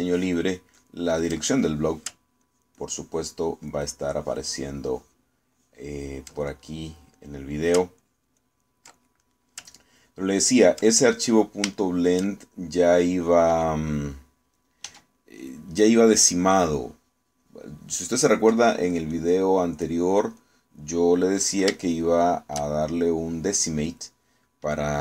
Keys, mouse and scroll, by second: 0.4 ctrl+click, 0.8 ctrl+click, 2.3 ctrl+click, 2.4 ctrl+middle click, 3.0-3.5 ctrl+scroll up 1, 3.5-6.4 ctrl+drag, 6.4 ctrl+scroll up 1, 6.6 ctrl+click, 7.3 ctrl+scroll up 1, 7.6-8.8 ctrl+middle drag, 9.0 ctrl+click, 10.0 ctrl+click, 10.3 ctrl+middle click, 11.0 ctrl+click, 11.9 ctrl+middle click, 12.8-14.9 shift+middle drag, 14.9 click, 15.9 f, 16.4 click, 16.8-19.6 drag, 19.6 middle click, 20.2 click, 21.9 middle click, 22.8-24.5 shift+middle drag, 24.6 middle click.